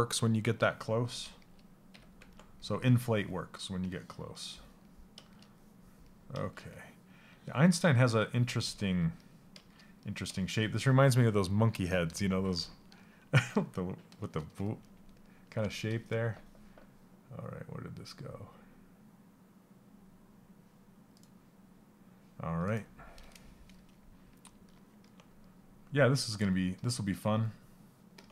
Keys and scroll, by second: 28.2 s.